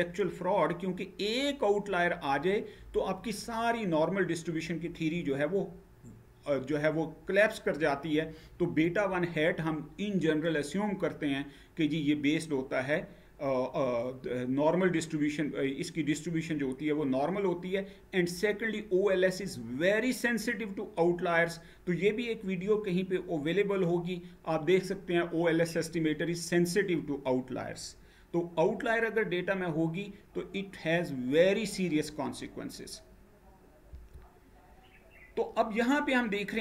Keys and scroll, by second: 33.5 Down.